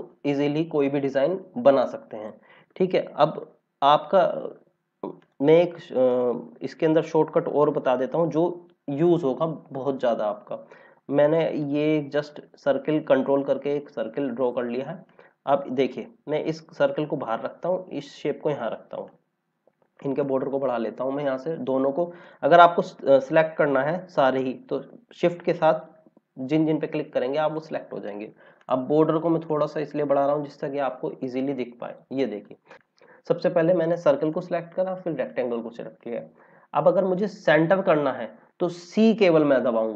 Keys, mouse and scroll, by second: 1.7 click, 5.1 click, 11.3 click, 15.7 click, 19.3 click, 22.2 click, 25.5 click, 28.5 click, 30.5-31.0 scroll down 1, 31.8 click, 39.8 c.